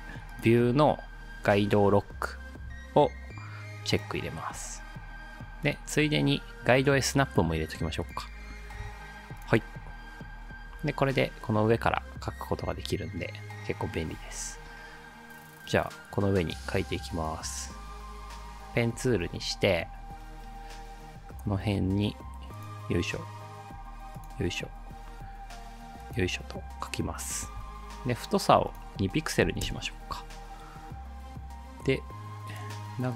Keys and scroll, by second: 29.5 2, 29.7 Return.